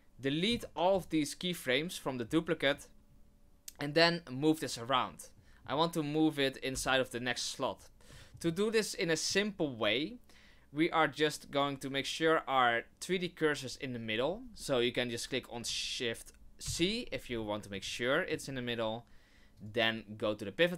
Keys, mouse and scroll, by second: 0.5 x, 5.3 middle click, 5.5 middle click, 5.6 scroll down 1, 6.7 g, 8.2 shift+middle click, 8.5 middle click, 16.6 shift+c, 17.2-17.7 scroll up 4, 17.8 shift+middle click, 19.5 click.